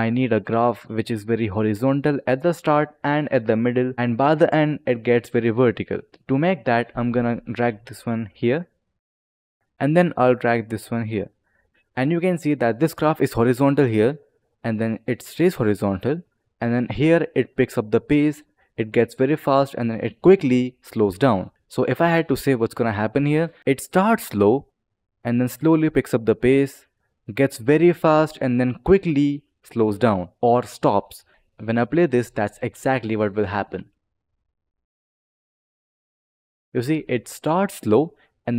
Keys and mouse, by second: 7.1 click, 10.2 click, 21.5 click, 31.3 click, 32.2 click, 33.5 space.